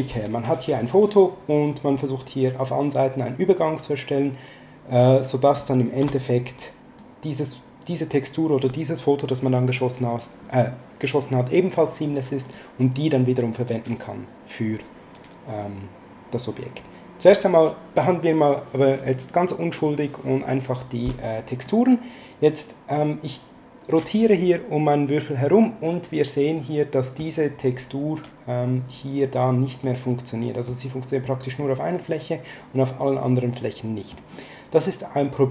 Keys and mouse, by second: 5.3 click, 6.0 BackSpace, 7.0 click, 12.4 click, 21.7 middle click, 29.8 middle click, 31.6 middle click.